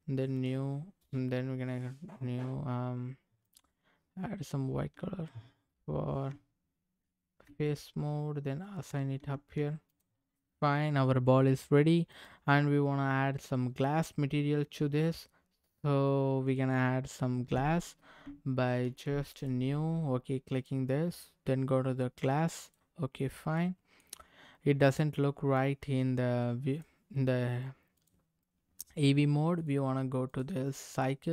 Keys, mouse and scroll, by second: 0.3 click, 3.4 click, 6.3 Tab, 8.7 click, 9.3 Tab, 9.9 click, 10.2-10.9 scroll down 2, 10.5-11.6 middle drag, 12.1 click, 16.4 click, 18.8 ctrl+z, 19.4 click, 20.5-22.7 drag, 23.6 middle click, 25.5-26.8 drag, 28.0 click, 29.6 click, 30.2 click.